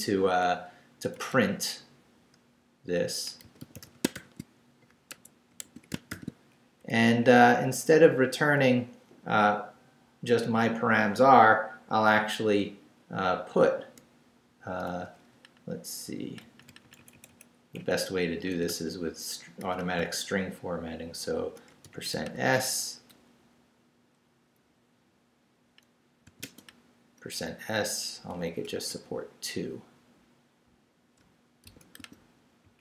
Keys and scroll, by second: 1.1 Left, 2.9-6.1 typing, 5.1 shift+Escape, 6.8 shift+Up, 15.3 Left, 16.4 Right, 18.5-20.7 typing, 21.8 shift+5, 23.1 s, 26.3 ,, 27.4 shift+space, 28.3 shift+4, 28.9 shift+BackSpace, 29.7 BackSpace, 31.6 shift+5, 32.6 Right.